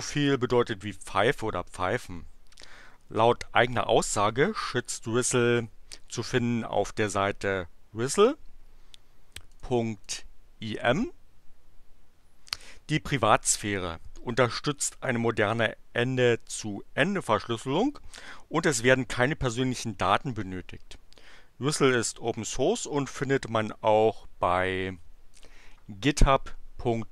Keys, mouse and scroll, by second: 9.5 click, 10.0 click, 25.3 click.